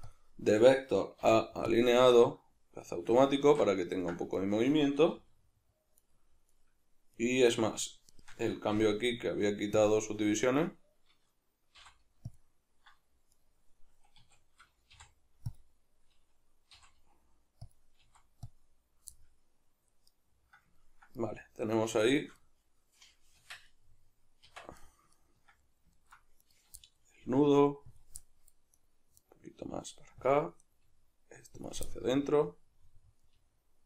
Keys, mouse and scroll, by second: 2.2-4.3 middle drag, 3.5 alt+q, 4.3 right click, 5.2 g, 6.5 right click, 7.1 right click, 8.1 shift+right drag, 8.7 w, 10.5 right click, 11.8 v, 13.3 right click, 14.2 a, 14.9 v, 19.1-26.4 middle drag, 23.4 Tab, 24.5 Tab, 26.4 right click, 26.8-28.0 middle drag, 27.2 g, 28.0 click, 28.2 middle click, 28.7 right click, 29.2 right click, 29.6 g, 30.3 click, 30.6 right click, 30.8 g, 31.7 click, 31.9-33.8 middle drag, 33.3 g.